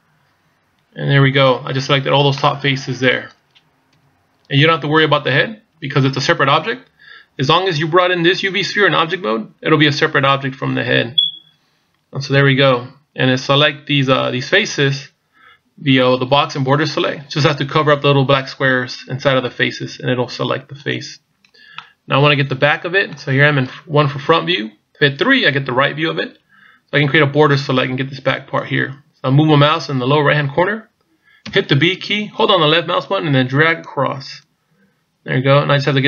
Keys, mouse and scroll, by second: 2.4 middle click, 3.9 KP_1, 11.2-12.6 scroll up 1, 16.2 b, 21.8 middle click, 22.8 middle click, 23.4-24.1 scroll down 1, 24.1 KP_1, 25.4 KP_3, 31.5 b.